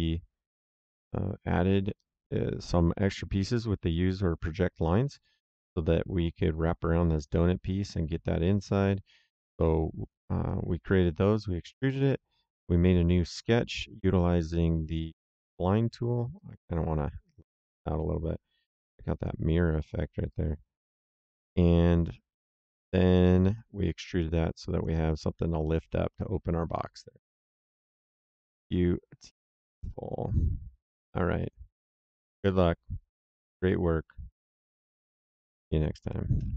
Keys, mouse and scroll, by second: 8.7 middle click, 9.2 right click, 11.9 click, 13.3 click, 14.2 middle click, 16.3 click, 20.2 click, 22.7 middle click, 23.1 right click, 24.7 click, 25.7 middle click, 26.1 right click.